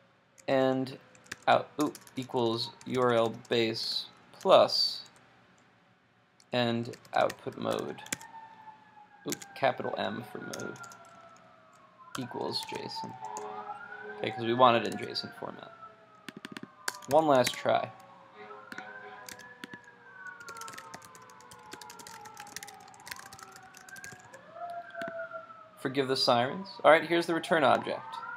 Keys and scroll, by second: 8.1 super+Tab, 9.5 super+Tab, 14.9 super+s, 17.5 super+s, 17.6 super+Tab, 19.3 super+r.